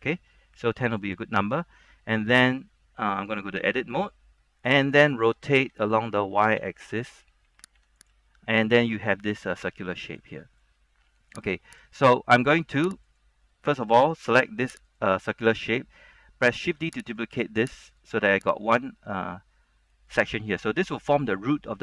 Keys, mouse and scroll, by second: 0.1-1.6 middle drag, 3.7 Tab, 4.2-5.7 middle drag, 6.7-7.9 typing, 8.1 click, 8.4 middle click, 8.9 scroll up 1, 9.2 middle click, 11.6 scroll down 1, 11.9 right click, 12.1 middle click, 12.7-13.2 scroll up 1, 13.2 right click, 13.9-14.9 scroll up 1, 15.4 alt+right click, 15.8-16.7 scroll down 1, 17.2 right click, 17.2 shift+d, 18.1 click, 19.4 middle click, 20.3 scroll up 1, 21.7 scroll down 1.